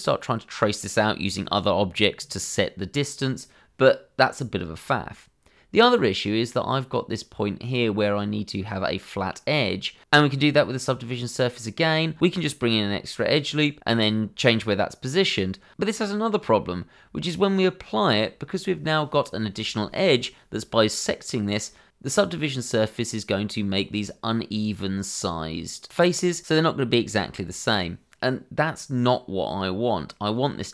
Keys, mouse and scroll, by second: 0.5 Tab, 0.5 scroll down 1, 0.8 shift+middle click, 1.4 click, 2.4 shift+middle click, 3.0 scroll up 1, 3.3 shift+middle click, 3.6 middle click, 4.5 Tab, 5.4 ctrl+r, 5.7 click, 6.1 Escape, 6.6 click, 7.1 Tab, 7.6 click, 8.0 shift+click, 8.5 shift+click, 8.8 alt+a, 9.4 middle click, 10.1 shift+z, 10.2 shift+middle click, 10.4 Tab, 11.1 click, 11.6 shift+click, 12.3 shift+e, 12.7 click, 13.9 click, 14.2 shift+z, 14.4 click, 14.6 shift+z, 15.1 g, 16.1 click, 16.8 shift+z, 16.9 click, 17.1 shift+z, 17.7 g, 18.9 click, 19.1 Tab, 19.4 middle click, 21.2 click, 22.0 Tab, 23.1 middle click, 24.1 click, 24.7 middle click, 26.2-27.2 scroll up 1, 27.6 Tab, 28.1 click, 28.7-29.4 scroll up 1, 29.4 middle click.